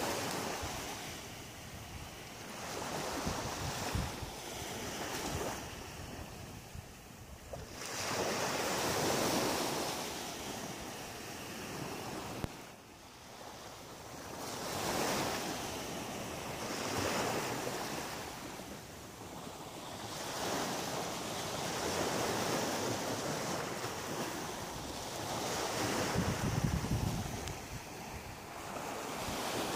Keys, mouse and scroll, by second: 0.4 shift+right click, 0.9 shift+right click, 1.6 shift+right click, 2.5 shift+right click, 2.8 shift+right click, 3.2 shift+middle click, 3.8 middle click, 4.8 shift+right click, 5.8 shift+right click, 6.2 shift+right click, 6.8 shift+right click, 7.5 shift+right click, 8.0 middle click, 9.7 shift+right click, 11.4 click, 26.4 middle click, 27.3-27.9 scroll down 5, 28.2 middle click.